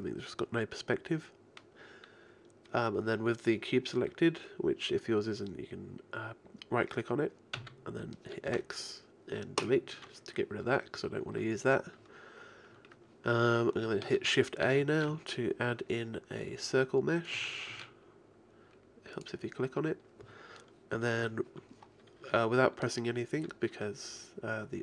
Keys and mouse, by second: 7.6 x, 14.7 shift+a, 17.7 shift+a.